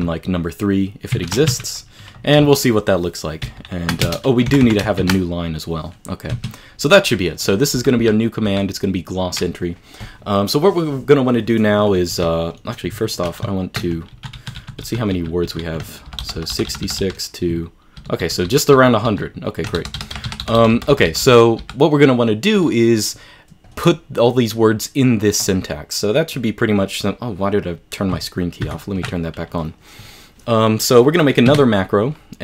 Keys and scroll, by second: 31.6 q.